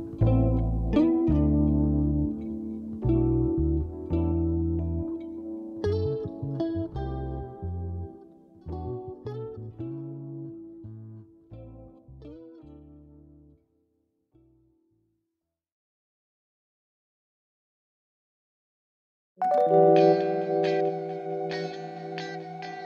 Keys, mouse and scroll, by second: 2.9 ctrl+shift+click, 3.5 shift+click, 4.2 shift+click, 5.4 click, 6.5 click, 7.9 click, 9.0 shift+click, 10.6 click, 14.3-15.6 drag, 16.1 click, 17.2 KP_6, 17.6 KP_Enter, 20.1-21.4 drag, 22.1 click.